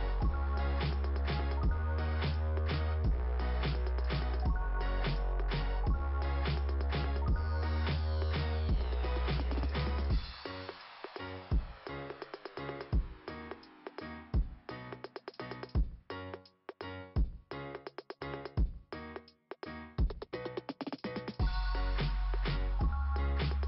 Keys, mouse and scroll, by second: 3.0-4.2 scroll up 2, 7.3 scroll down 2, 7.5 scroll up 2, 7.7 scroll down 2, 7.7 scroll up 2, 12.0 click, 16.7 click, 18.7 click, 20.0 click.